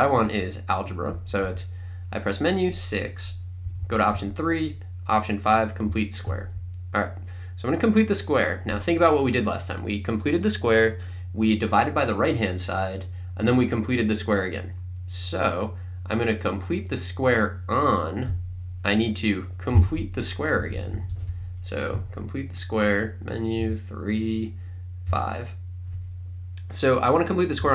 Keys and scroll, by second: 0.3 Right, 1.2 Left, 3.1 Right, 3.7 Down, 4.2 Right, 5.9 5, 19.8 Menu, 20.6 Down, 22.0 Right, 23.7 3, 25.1 5, 27.4-27.7 typing.